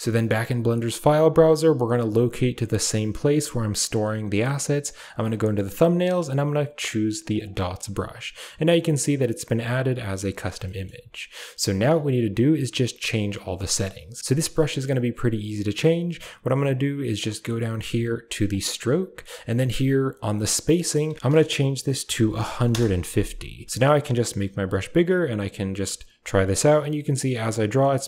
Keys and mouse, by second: 5.0 click, 5.1 click, 6.7 click, 7.2 click, 7.4 click, 10.6 shift+middle click, 13.8 click, 18.5-19.0 drag, 20.7-22.7 drag, 24.3 f, 25.2-28.0 drag.